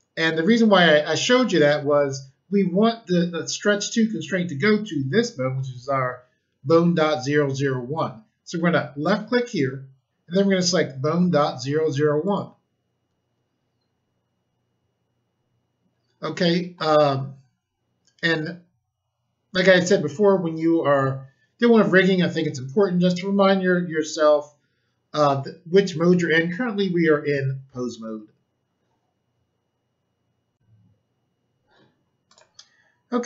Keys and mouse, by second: 9.4 click, 12.2 click, 30.5 click, 32.2 click.